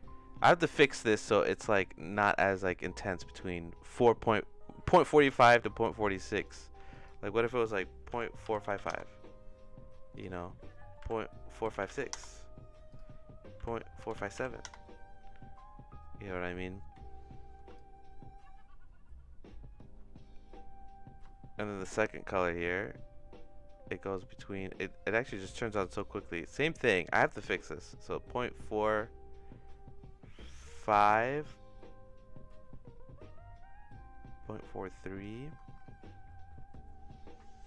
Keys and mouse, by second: 6.9-15.6 drag, 8.7 KP_5, 17.8-35.2 shift+drag.